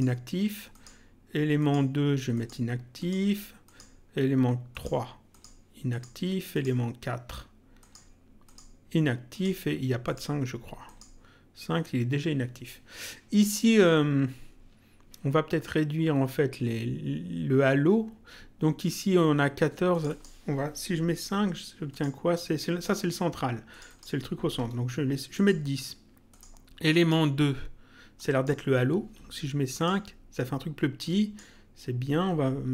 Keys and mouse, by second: 7.7 click, 19.8 click, 21.8 click, 23.6 click, 25.3 click, 28.1 click, 29.7 click, 31.0 click.